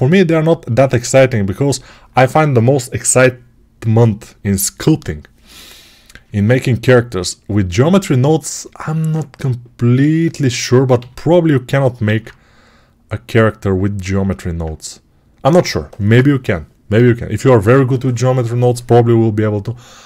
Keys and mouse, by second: 10.8 g, 12.7 alt+q, 14.0-20.0 alt+drag.